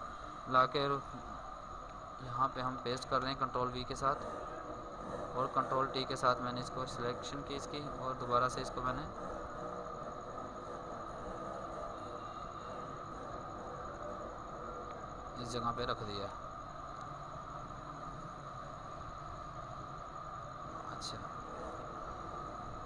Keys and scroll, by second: 0.6 ctrl+Tab, 1.6 ctrl+v, 2.0 ctrl+t.